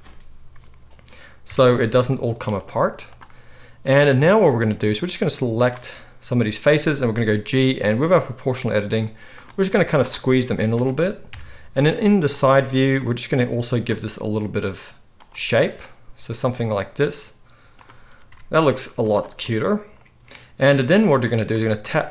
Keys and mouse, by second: 1.5 a, 2.0 g, 2.8 z, 4.2 z, 4.9-9.4 drag, 6.9 g, 9.4-13.0 middle drag, 9.7 z, 11.2 KP_3, 11.8 z, 13.0-15.2 drag, 14.0 g, 15.2 middle click, 15.8-17.8 drag, 16.3 g, 18.2 Tab, 18.9 z, 20.5-22.1 middle drag, 21.5 Tab.